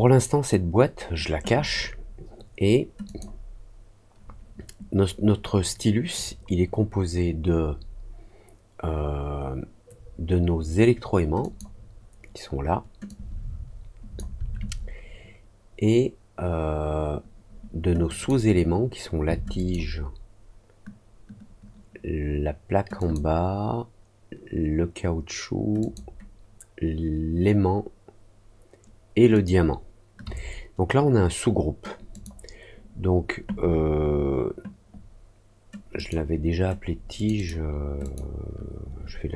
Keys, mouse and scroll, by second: 3.0 click, 11.3 click, 13.0-14.1 drag, 18.0 click, 19.5 ctrl+click, 22.9 ctrl+click, 25.7 ctrl+click, 29.3 ctrl+click, 32.1 click, 35.9 click, 37.1 click, 37.3 click, 38.0 click.